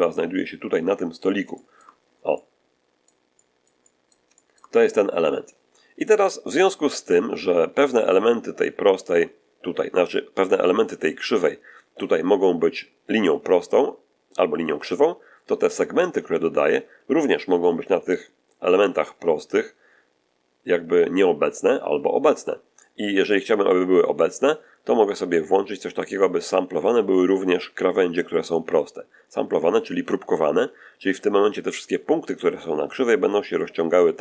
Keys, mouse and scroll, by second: 1.4 shift+middle click, 2.5 middle click, 3.2 middle click, 21.0-22.4 middle drag, 22.7-23.8 middle drag, 24.0 scroll down 1.